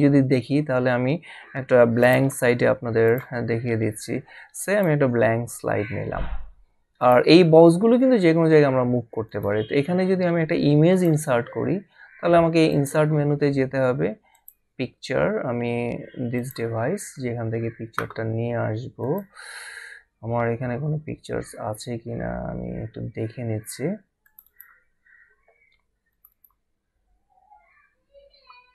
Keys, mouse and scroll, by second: 2.0 click, 3.2 click, 4.7 click, 7.0 click, 9.2 click, 10.9 click, 12.7 click, 14.3 click, 16.4 click, 19.0 click, 24.2 click, 26.6 click.